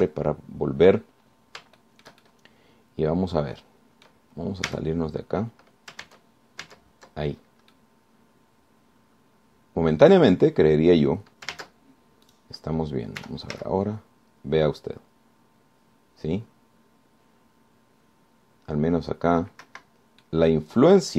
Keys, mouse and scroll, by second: 0.8 alt+r, 1.5-2.0 alt+scroll down 3, 2.0 scroll up 2, 2.4 scroll down 2, 3.0-5.5 shift+drag, 5.9 Tab, 7.2 ctrl+Tab, 8.6-9.0 ctrl+scroll down 3, 9.0-11.4 drag, 12.8 ctrl+Tab, 13.5 click, 14.4 r, 14.8 z, 20.8 Escape.